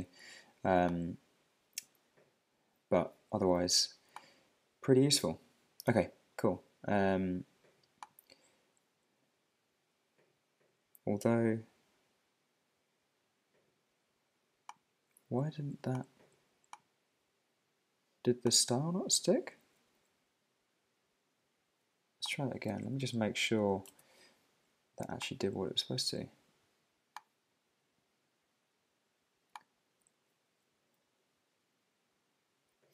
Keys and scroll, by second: 22.8 super+Tab, 23.9 shift+super+Tab.